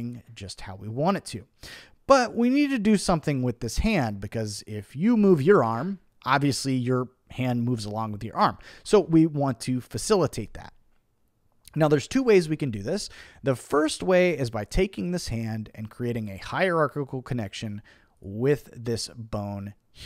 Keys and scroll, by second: 8.7 super+z.